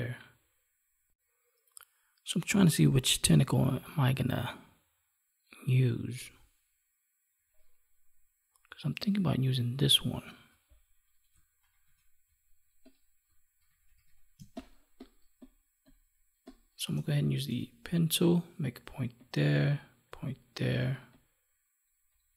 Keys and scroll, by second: 11.6 ctrl+=, 13.5 ctrl+=.